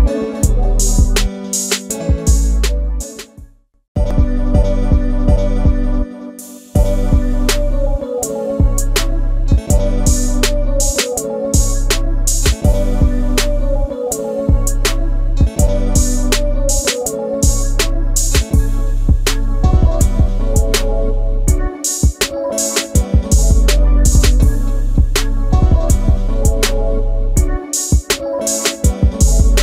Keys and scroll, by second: 0.1 s, 2.4 space, 4.8 m, 10.0 space, 11.6 r, 13.2 space, 13.9 e, 16.0 space, 18.3 Escape, 20.9 space, 21.2 e, 21.8 space, 22.7 p, 23.8 space, 23.9 Escape, 24.0 Escape, 24.1 Escape, 28.9 space, 29.0 Escape, 29.1 Escape, 29.2 Escape.